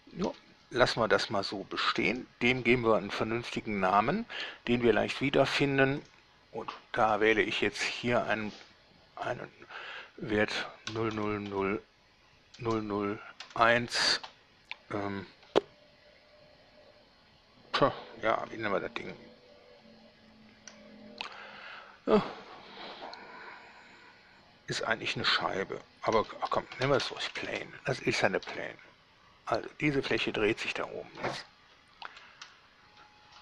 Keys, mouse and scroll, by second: 0.5 Escape, 1.8 scroll down 2, 2.4 middle click, 5.8 click, 6.2 click, 7.2 click, 8.1 click, 11.1 0, 11.4 0, 11.7 0, 12.8 BackSpace, 13.6 1, 14.4 space, 26.7-27.4 typing, 27.7 Return, 28.7 a, 30.4 Escape, 31.0 scroll down 2, 32.2 shift+1.